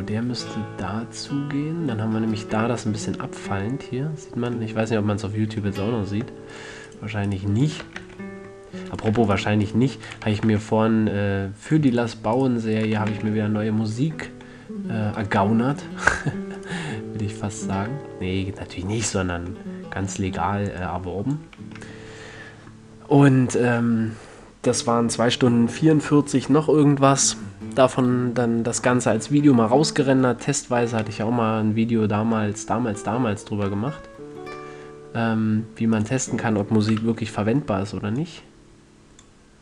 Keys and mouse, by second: 0.1 Tab, 6.5 Tab, 8.2 f, 8.3 a, 10.6 f, 10.8 a, 13.3-13.7 drag, 13.3 f, 13.5 a, 15.7-16.5 drag, 17.7-19.5 middle drag, 21.1-22.8 drag, 21.8 a, 22.8-25.0 middle drag, 31.1 click, 31.2 middle click, 31.3 click, 31.5 middle click, 31.5 click, 31.7-32.1 middle drag, 32.1 click, 32.3 middle click, 32.3 click, 35.6-36.3 middle drag, 36.3-39.6 drag, 37.3 KP_7.